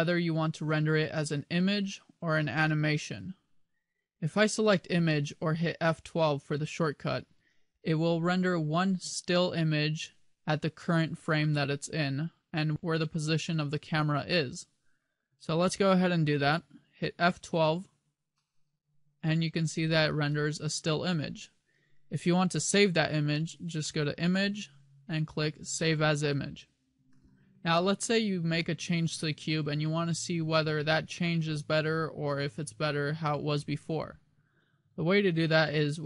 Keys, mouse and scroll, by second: 18.9 F12.